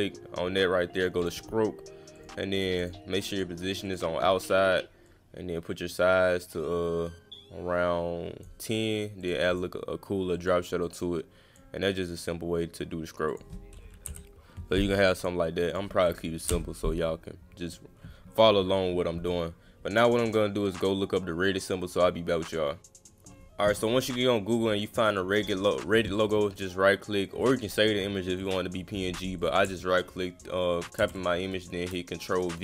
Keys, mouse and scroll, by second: 0.9 click, 1.2 click, 2.2 click, 2.6 click, 2.8 click, 3.2 click, 3.9 click, 5.0 click, 9.2 click, 9.5 click, 10.3 click, 10.9 click, 12.2 click, 13.3 click, 15.2 click, 15.7 click, 18.3 click, 23.8 right click, 25.1 click, 29.4 click, 31.0 ctrl+v, 31.9 click.